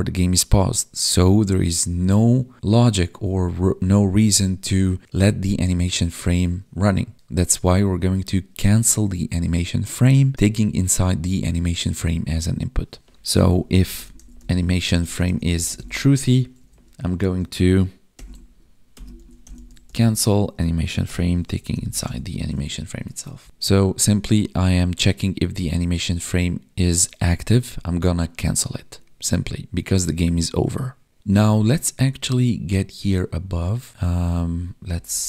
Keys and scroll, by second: 16.1 Tab, 16.5 Right, 20.0 Tab, 22.3 Tab, 23.3 Right, 31.2 Up, 34.0 Down.